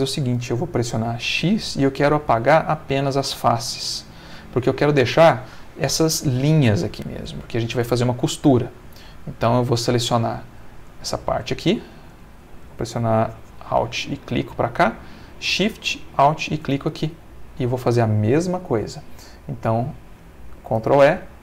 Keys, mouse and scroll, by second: 1.3 x, 3.0 click, 3.8 middle click, 6.4 middle click, 6.9-8.3 middle drag, 8.9 middle click, 9.4 space, 9.8 middle click, 10.9 space, 11.1 click, 12.1 Escape, 13.8 alt+click, 14.3-15.4 alt+middle drag, 16.2 alt+shift+click, 17.0-18.1 alt+shift+middle drag, 21.0 ctrl+e.